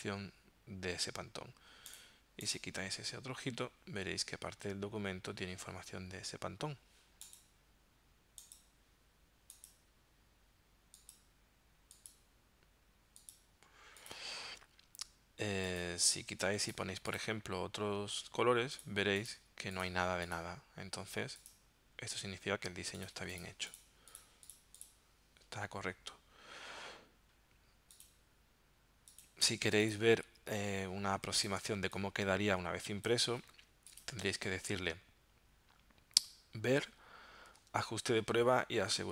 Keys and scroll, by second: 31.3 z, 31.7 space.